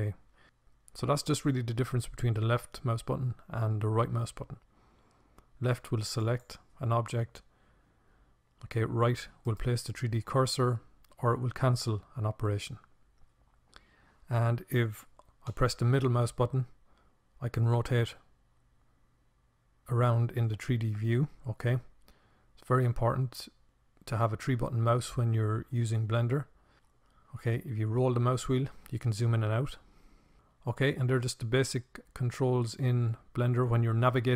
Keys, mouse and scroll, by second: 15.8-17.8 middle drag.